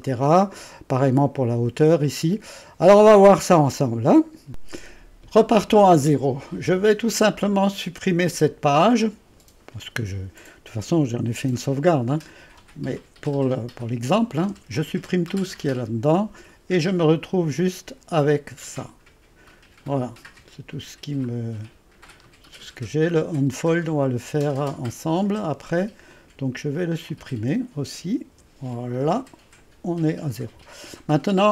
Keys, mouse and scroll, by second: 0.0 middle click, 0.0-0.6 scroll, 3.0-4.1 scroll down 2, 4.1-4.5 scroll down 1, 4.5 click, 8.5 click, 14.5 Delete, 15.8-18.8 drag, 18.8-19.4 scroll down 1, 22.3-23.9 scroll down 1, 23.9-24.7 scroll down 1, 26.1-27.4 drag, 28.4 Delete.